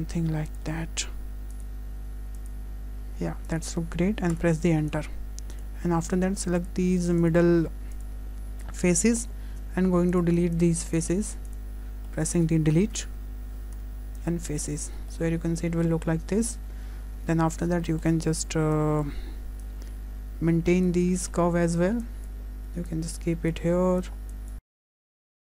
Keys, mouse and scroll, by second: 9.5 shift+middle click, 9.5 scroll down 1, 10.1 scroll up 1, 12.1 shift+click, 12.6 shift+middle click, 16.0 Delete, 16.0 shift+middle click, 16.0 scroll down 2, 16.4 shift+middle click, 17.0 Tab, 17.0 scroll up 2, 17.2 Tab, 17.8 shift+middle click, 18.4 1, 18.8 click, 19.6 click, 21.2 shift+middle click, 21.6 scroll down 1, 22.1 click, 22.9 click, 24.3 click, 24.6 click, 25.0 click.